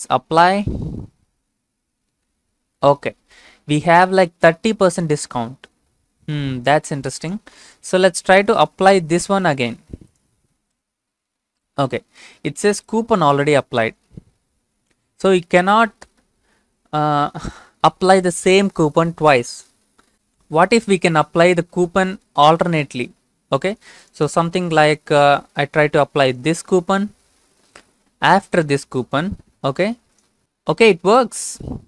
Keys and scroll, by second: 8.8 ctrl+v, 25.6 ctrl+c, 26.7 ctrl+v.